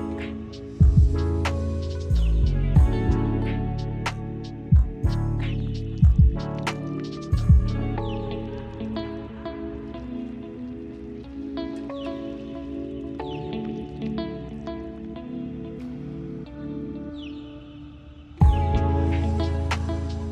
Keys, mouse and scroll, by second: 0.7 shift+d, 1.2 click, 1.9 scroll up 5, 2.1 click, 2.5 click, 2.8 middle click, 3.0 scroll up 4, 3.1 middle drag, 3.4 click, 4.2 shift+d, 4.6 click, 5.0 click, 5.3 middle drag, 5.5-5.9 scroll up 3, 5.9 click, 6.2 click, 7.1 shift+d, 8.0 click, 8.9 click, 10.0 click, 10.4 middle click, 10.4-10.8 scroll down 2, 10.5 middle click, 10.8 middle drag, 10.9 click, 11.1 x, 11.4 middle click, 11.7 drag, 11.9 x, 13.2 click, 14.0 z, 14.2 x, 14.5 middle click, 14.8 scroll up 1, 15.0 click, 15.2 x, 15.6 click, 16.1 `, 16.4 click, 16.5 scroll up 3, 16.8 click, 17.3 `, 17.5 click, 17.9 click, 18.3 s, 18.7-19.5 middle drag, 19.8 click, 19.9 middle click, 20.1-20.3 scroll down 9.